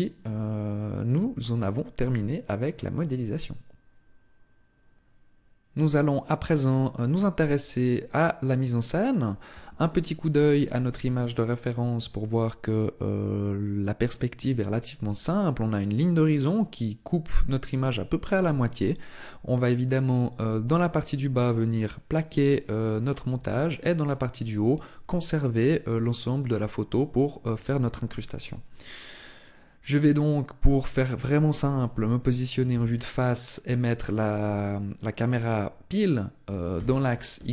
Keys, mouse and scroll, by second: 0.1 shift+middle click, 7.5 middle click, 32.5 KP_1, 36.5 ctrl+alt+KP_0.